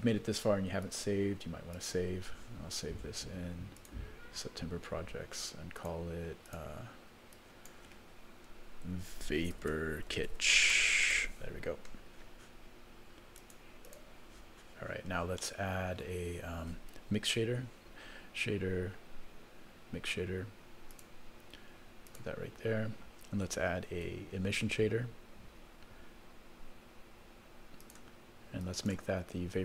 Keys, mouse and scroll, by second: 0.8-2.0 drag, 15.0-15.4 scroll up 2, 15.4 middle click, 16.3-17.2 scroll up 1, 17.2 scroll up 1, 17.3 shift+a, 24.0 shift+a.